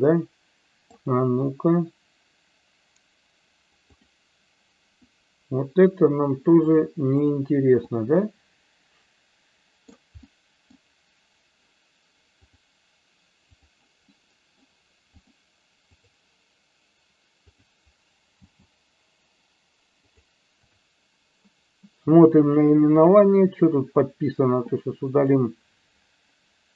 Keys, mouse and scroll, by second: 3.9 click, 5.0 middle click, 6.8 click, 7.9-9.9 middle drag, 10.3-10.7 middle drag, 12.5 click, 14.2 middle click, 15.2 click, 17.5 click, 18.5 g, 20.0 click, 20.6 click, 22.5 click, 25.2 click.